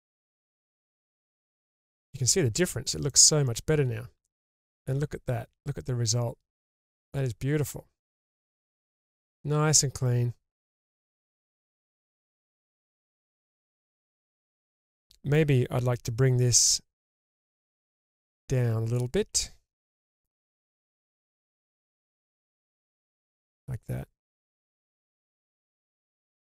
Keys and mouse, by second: 0.5 click, 0.5 g, 1.2-2.6 middle drag, 3.1 middle click, 3.9 Tab, 4.7-10.6 middle drag, 10.9 Tab, 11.9-12.3 middle drag, 12.9-15.4 middle drag, 16.6 2, 17.5-18.3 middle drag, 18.9-19.3 ctrl+drag, 20.3 g, 20.5 g, 21.9 drag, 22.1-23.5 middle drag, 24.3-26.5 drag.